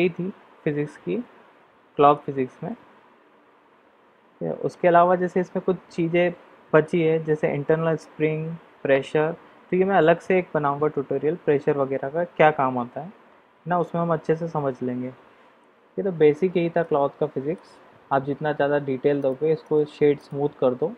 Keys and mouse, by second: 16.8-17.5 middle drag, 19.2 click, 19.6 click.